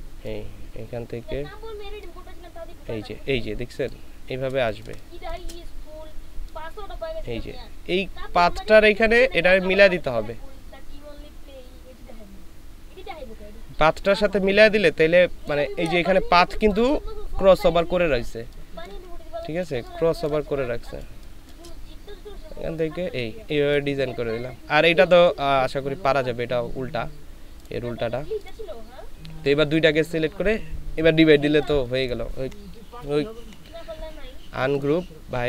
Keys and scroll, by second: 4.6 ctrl+space, 16.0 ctrl+space, 18.4 ctrl+space.